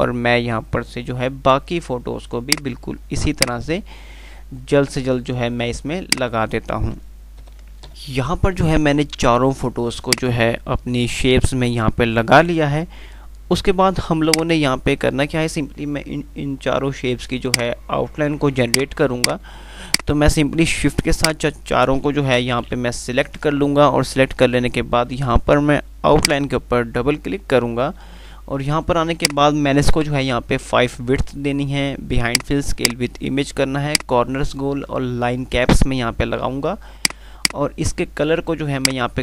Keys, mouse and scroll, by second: 1.4 F3, 2.6-5.2 drag, 5.2 F2, 7.9 shift+Page_Up, 8.2 click, 10.4 click, 13.2 F2, 14.5-15.0 click, 19.9 click, 20.7-21.7 shift+click, 22.4 Delete, 23.5 z, 29.2 click, 32.3 click, 34.1 click.